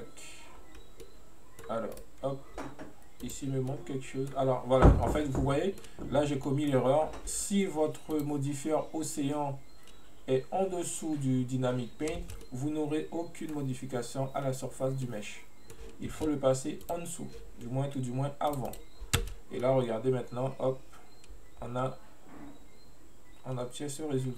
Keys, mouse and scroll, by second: 1.1-2.0 middle drag, 2.0-3.2 right drag, 3.3 click, 3.7-4.8 middle drag, 4.8-5.1 scroll up 1, 5.1-8.2 middle drag, 8.2 click, 12.3 space, 12.5-16.2 middle drag, 16.2 space, 16.9-19.3 drag, 19.3 space, 19.7-22.7 middle drag.